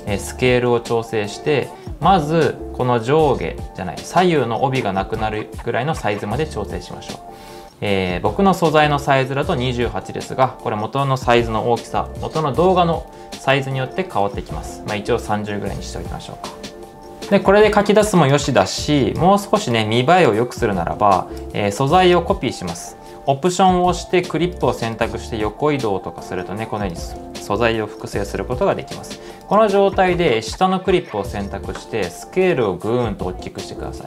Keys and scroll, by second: 11.1-14.1 typing, 17.0 super+z, 27.3 super+z, 28.7 2.